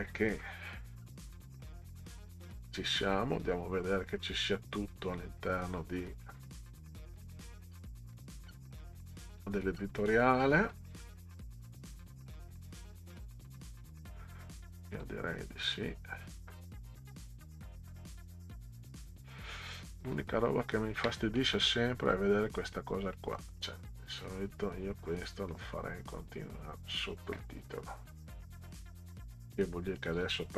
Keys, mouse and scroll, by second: 4.6 scroll down 2, 5.3 scroll down 2, 7.6-12.7 scroll down 32, 13.5-14.2 scroll down 4, 22.4 click, 23.2 middle click, 25.5-26.7 drag, 28.6 middle click, 28.7-29.3 scroll up 2, 29.5 middle click.